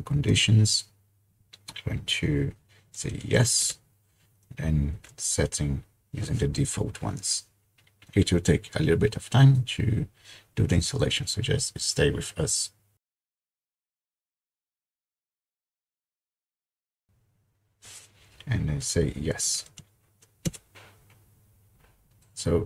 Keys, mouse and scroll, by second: 0.3 typing, 2.7-3.9 typing, 5.0 Return, 18.8-20.2 typing, 20.5 Return.